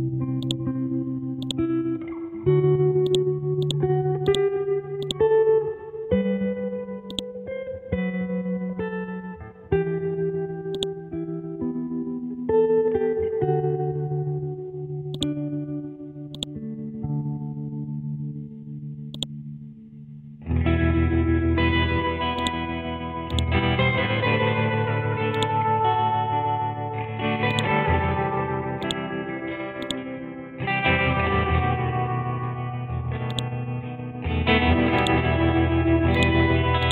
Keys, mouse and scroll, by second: 8.6-9.2 scroll down 1, 10.7-29.8 drag, 32.0-33.3 scroll down 1, 33.3 click, 33.8-34.8 scroll up 1, 35.0-36.9 drag.